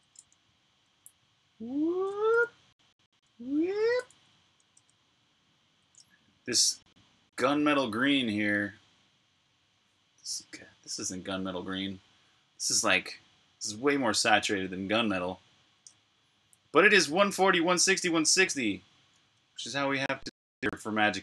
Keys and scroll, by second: 19.7 super+Tab.